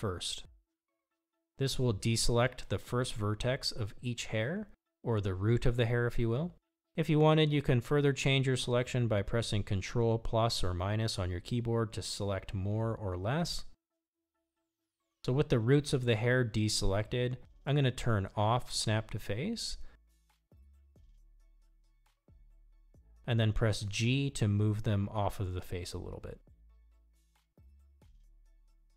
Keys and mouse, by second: 1.7-6.6 drag, 9.2 ctrl+KP_Subtract, 10.8 ctrl+KP_Subtract, 12.8 ctrl+KP_Add, 13.6 ctrl+KP_Add, 15.6 ctrl+KP_Subtract, 21.7 click, 23.3 ctrl+KP_Add, 25.9-27.3 middle drag, 28.2 g.